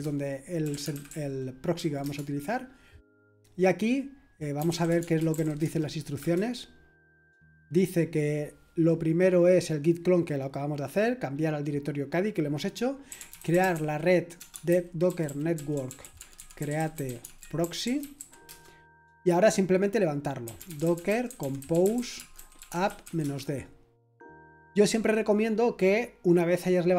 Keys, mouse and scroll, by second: 0.0-2.7 typing, 4.3-7.4 typing, 12.8-18.8 typing, 20.2-23.7 typing.